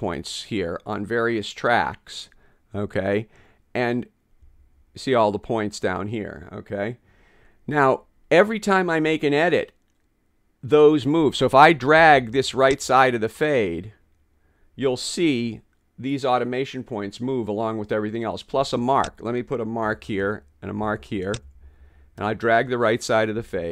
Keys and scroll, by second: 19.9 m, 21.5 m.